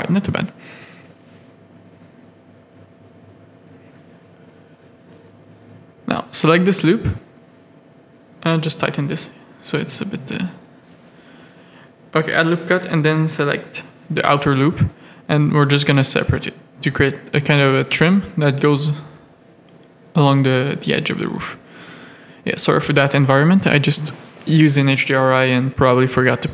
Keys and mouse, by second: 1.3 3, 1.6 z, 1.8 a, 3.0 1, 3.7 3, 4.6 z, 5.0 click, 5.1 middle click, 5.5 shift+middle click, 6.5 click, 6.7 middle click, 7.3 1, 7.6 g, 8.9 ctrl+r, 9.5 3, 10.5 alt+click, 11.0 middle click, 12.8 z, 14.3 click, 15.1 Tab, 15.3 alt+a, 15.5 z, 19.3 alt+a, 19.7 z, 21.5 click, 22.7 z, 23.1 click, 24.0 middle click, 24.6 middle click.